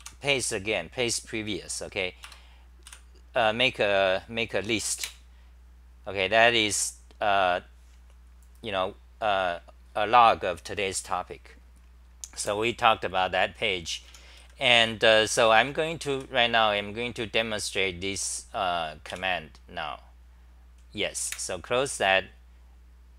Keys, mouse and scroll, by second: 0.0 k, 5.1 super+r, 12.5 super+w, 13.8-16.2 typing, 19.1 j, 21.3 super+w.